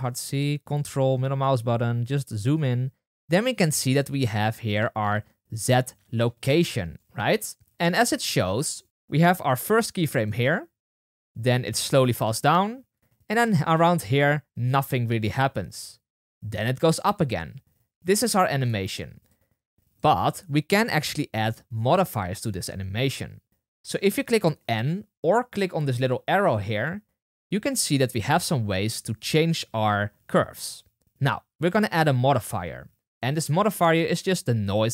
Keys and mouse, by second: 4.6 click, 5.5 click, 8.5-10.2 drag, 10.8-12.8 typing, 18.6 space, 19.2-32.1 drag, 33.1-34.9 drag.